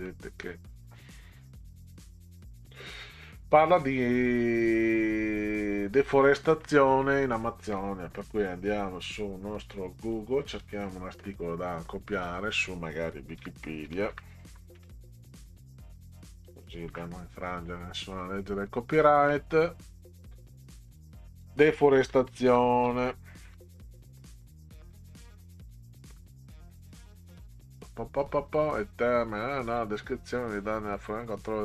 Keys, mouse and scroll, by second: 0.1 middle click, 0.4-0.8 scroll up 2, 1.6 click, 2.0 scroll down 2, 2.7 middle click, 4.6-5.7 drag, 6.6 middle click, 8.7 click, 10.0 click, 10.6 click, 12.2 click, 13.6-16.5 typing, 16.9 Return, 18.6 click, 20.9 click, 21.9-26.2 typing, 29.7 scroll down 2, 30.3 scroll down 2, 31.2 scroll down 2.